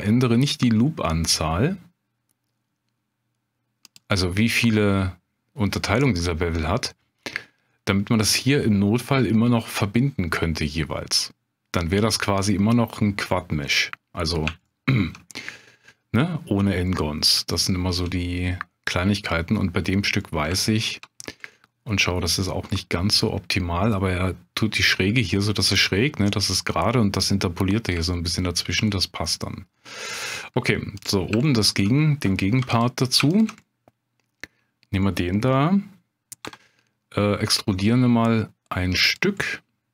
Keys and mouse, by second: 3.8 click, 6.0-7.5 middle drag, 13.4 middle click, 14.6 shift+click, 15.3 middle click, 16.9 middle click, 17.5 shift+middle click, 20.2 middle click, 20.6 shift+middle click, 21.5 middle click, 22.7 middle click, 28.1 shift+click, 30.3 middle click, 31.4 shift+click, 32.6 3, 33.3 shift+click, 33.6 middle click, 36.4 e, 39.0 click, 39.4-39.9 middle drag.